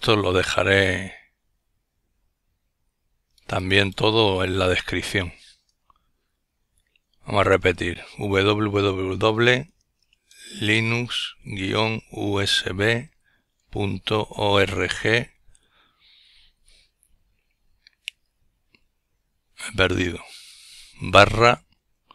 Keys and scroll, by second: 1.6-2.9 typing, 4.6-10.6 typing, 16.9-18.9 typing, 21.1-22.1 typing.